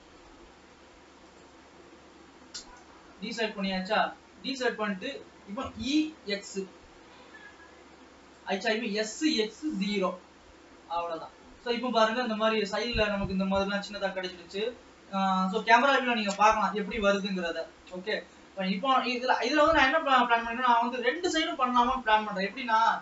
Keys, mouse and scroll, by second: 1.5 shift+click, 2.7 KP_0, 4.3-6.3 middle drag, 6.3 e, 9.2 s, 11.0 scroll up 2, 11.3-13.8 middle drag, 13.8 ctrl+s, 14.0 scroll down 2, 16.0-16.8 scroll up 2, 16.8-17.7 scroll down 1, 17.7-18.8 middle drag, 18.8 ctrl+s, 19.2-20.0 scroll down 2, 20.0-23.0 middle drag.